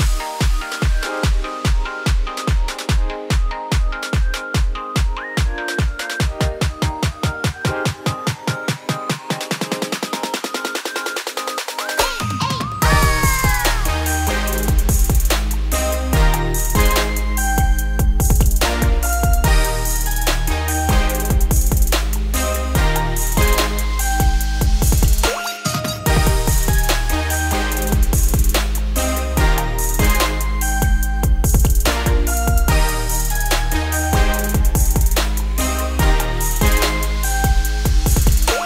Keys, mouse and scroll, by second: 0.4-2.4 ctrl+middle drag, 2.4 alt+shift+click, 3.0-4.3 shift+middle drag, 4.3 alt+shift+click, 4.7-5.4 scroll down 11, 5.4 shift+middle click, 5.7-6.7 scroll up 12, 6.7-8.1 shift+middle drag, 8.1 alt+shift+click, 9.0 alt+shift+click, 9.4-9.7 scroll down 5, 9.7 shift+middle click, 10.0-11.1 scroll up 6, 11.1 alt+shift+click, 11.4 scroll down 2, 11.6 shift+middle click, 12.6 alt+shift+click, 13.0 alt+shift+middle click, 13.7-14.9 shift+middle drag, 14.9 alt+shift+click, 15.4-16.9 shift+middle drag, 16.9 alt+shift+click, 17.3-17.9 scroll down 7, 17.9 shift+middle click, 18.2-19.1 scroll up 4, 19.1 ctrl+b, 25.2-25.8 scroll up 3, 25.8 alt+e, 29.5 Tab, 30.6 alt+x, 31.9-33.1 scroll up 2, 33.1-36.1 shift+drag, 36.9 Tab, 37.2 a, 38.1 shift+n, 38.2 scroll up 3, 38.3 Tab.